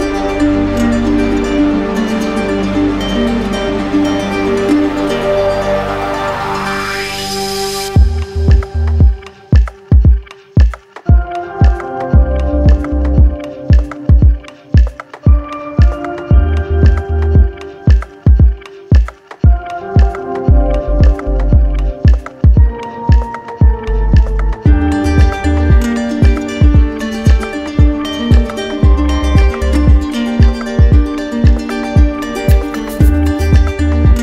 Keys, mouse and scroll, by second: 0.0 right click, 0.8 click, 1.3 shift+right click, 1.9 z, 3.2 click, 4.3 click, 4.3 alt+right click, 5.2 right click, 9.2 right click, 9.2 alt+click, 9.4 ctrl+z, 10.9-11.9 drag, 12.0-13.1 drag, 13.6-14.6 drag, 14.9-15.9 drag, 17.1 click, 19.8 alt+click, 20.0 ctrl+z, 22.0 alt+click, 22.2 ctrl+z, 28.3 alt+click, 28.5 ctrl+z, 29.1 right click, 30.0 click, 30.6 shift+click.